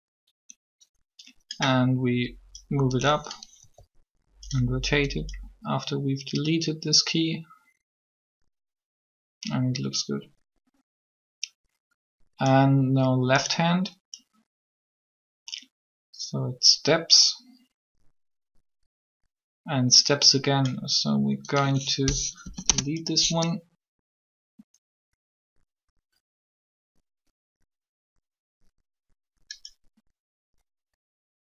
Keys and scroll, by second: 3.6 r, 22.1 Delete, 22.5 Return.